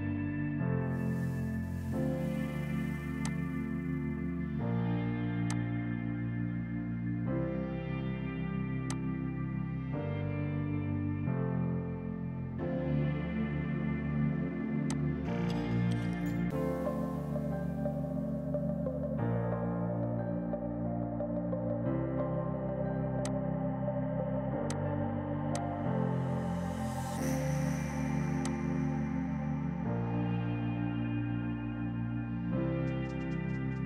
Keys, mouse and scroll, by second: 6.4 Left, 6.6 Up, 8.0 Left, 8.9 click, 9.2 Left, 14.9 click, 16.2 KP_8, 16.4 KP_Enter, 17.9 Left, 20.7 ctrl+Num_Lock, 21.6 ctrl+shift+q, 23.3 click, 25.5 click, 27.5 space, 27.7 Escape, 28.1 F3, 28.3 F2, 28.4 click, 28.6 right click.